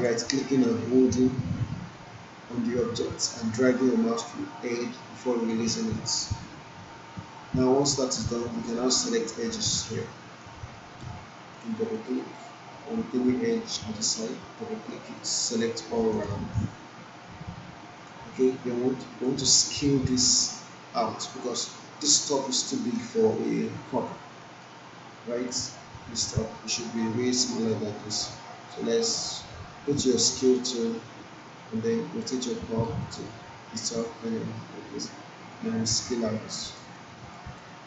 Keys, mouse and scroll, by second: 7.2-7.9 alt+click, 8.3 alt+middle click, 10.7 alt+middle click, 11.7 click, 15.1 right click, 16.3 alt+middle click, 16.7-18.3 alt+drag, 18.4-19.3 alt+drag, 21.5-22.2 alt+drag, 23.1-24.3 alt+drag, 24.4 alt+middle click, 24.8-25.7 alt+drag, 27.5-28.1 alt+drag, 30.5 click, 31.4-32.7 alt+drag, 32.8-34.2 alt+right click, 33.2-35.5 alt+drag, 35.5-37.6 drag, 37.0 alt+click, 37.6-37.8 alt+right click.